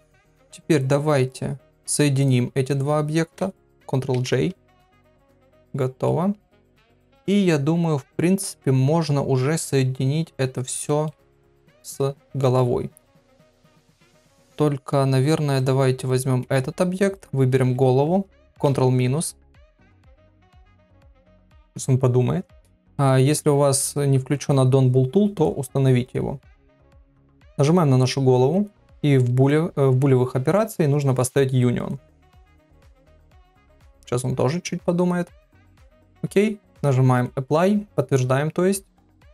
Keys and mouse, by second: 1.6 middle click, 2.2 shift+click, 4.1 ctrl+j, 6.0-9.4 middle drag, 10.8 shift+middle click, 12.2 middle click, 13.8 click, 15.5 click, 21.5 ctrl+KP_Subtract, 25.4 click, 28.5 click, 29.4 click, 36.7-39.3 drag.